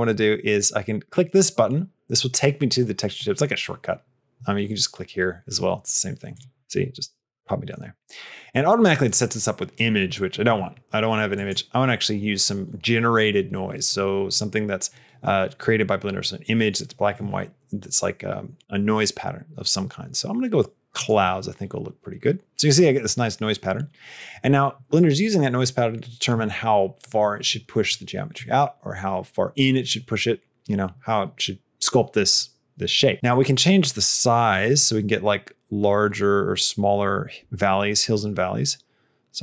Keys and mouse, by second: 6.1 click, 11.3-21.0 drag, 33.7-39.4 drag.